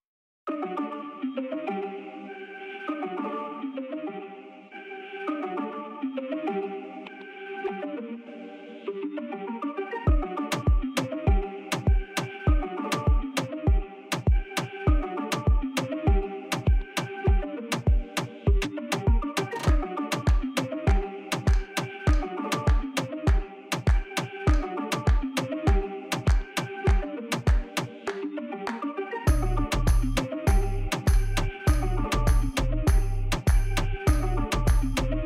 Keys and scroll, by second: 2.0 s, 7.0 1, 7.4 shift+z, 9.3 e, 10.6 s, 12.1 shift+z, 14.9 g, 17.2 s, 22.0 3, 23.8 s, 24.1 shift+z, 28.2 1, 28.6 shift+z, 30.0 g, 32.2 2, 33.4 ctrl+b.